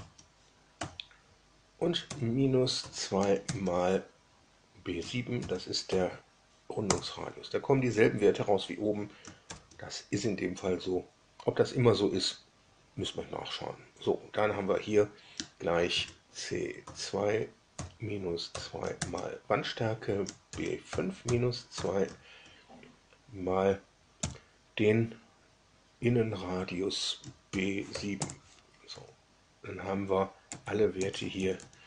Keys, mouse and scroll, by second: 0.7 5, 2.0 -, 2.7 2, 5.3 shift+b, 5.8 shift+7, 6.8 Return, 9.4 shift+0, 15.8 shift+c, 16.7 2, 17.7 -, 18.4 2, 20.2-22.2 typing, 27.4 shift+b, 27.8 7, 28.1 Return, 28.8 Up, 30.4 Down, 30.9 Up, 31.2 Up, 31.3 Up, 31.5 Up.